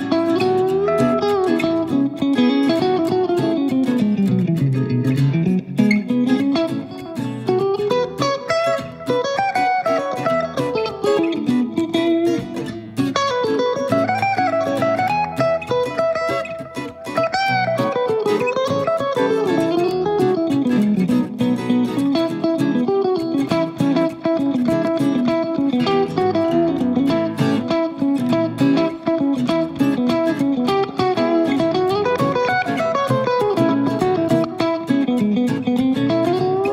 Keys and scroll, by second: 4.5 super+d, 10.4 Right, 10.6 Right, 10.9 Right, 11.5 Left, 19.6 typing, 24.3 BackSpace, 27.8 super+c, 28.0 super+v.